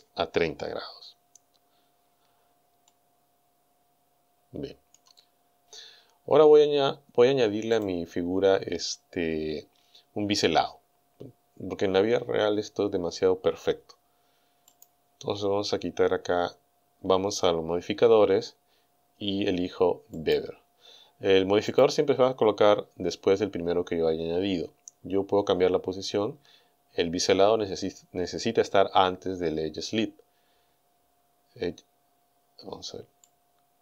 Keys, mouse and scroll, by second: 2.0-2.4 scroll down 1, 2.9-5.2 middle drag, 5.4 scroll up 2, 7.8 click, 9.9-10.3 scroll up 2, 10.4 scroll down 2, 14.8 click, 20.2 click, 21.7 click, 33.3-33.8 drag.